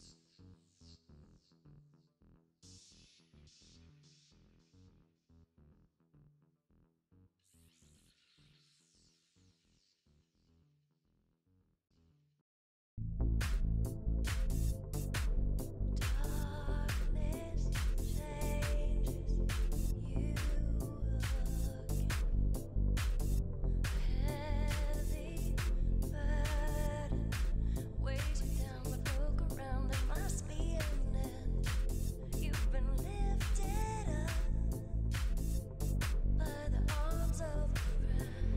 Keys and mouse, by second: 0.6-3.4 middle drag, 3.4 click, 4.4 middle drag, 4.7 z, 5.7 KP_7, 6.3 z, 8.0 click, 8.9-9.5 right drag, 9.5 Tab, 10.0 a, 10.1 a, 11.0 a, 11.3 a, 12.5 s, 13.5 z, 17.8-19.9 typing, 18.8 middle click, 20.9 z, 20.9 KP_1, 21.2 z, 22.6 s, 25.5 z, 25.6 KP_7, 26.3 z, 27.0 z, 28.8 Tab, 29.1 click, 29.1 right click, 29.5 Tab, 30.0 ctrl+Tab, 31.0 ctrl+Tab, 32.5 shift+d, 33.7 p, 34.2 Tab, 35.9 KP_Divide, 36.6 Tab, 38.3 ctrl+Tab.